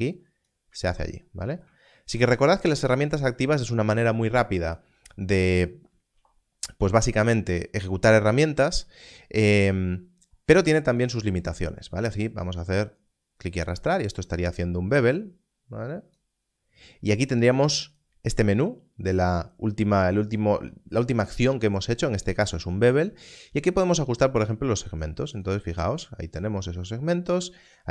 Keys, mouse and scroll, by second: 0.8 ctrl+z, 6.6 click, 9.5 click, 24.8 click.